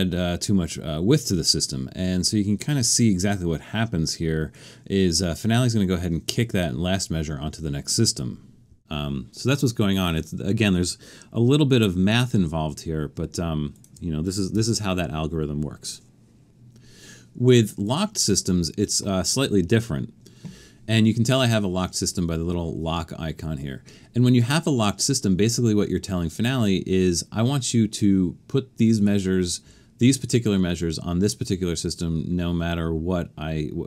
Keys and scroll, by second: 14.6 BackSpace.